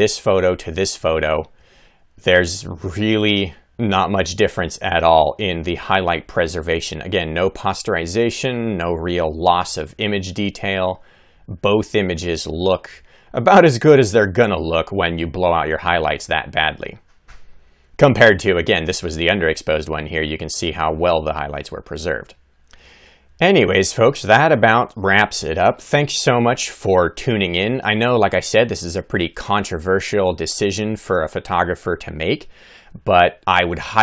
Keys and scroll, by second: 0.7 Left, 1.3 Right, 1.9 Left, 2.5 Right, 3.7 Left, 4.1 Right, 4.5 Left, 4.9 Right, 5.5 Left, 9.8 Right, 12.7 Left, 16.4 Left.